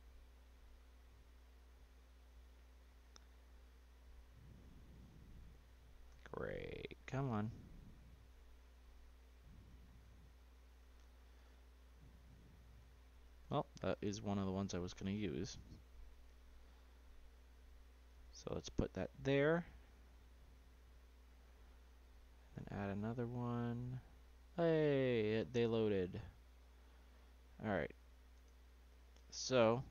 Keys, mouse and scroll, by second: 9.8-10.6 scroll up 4, 10.6-11.3 scroll down 1, 11.3 s, 13.6-14.7 middle drag, 14.7 click, 16.0-16.8 scroll down 2, 16.8 click, 18.3 shift+middle click, 19.0-19.6 scroll up 2, 19.9 click, 21.0 click, 22.4 d, 28.7-29.9 middle drag.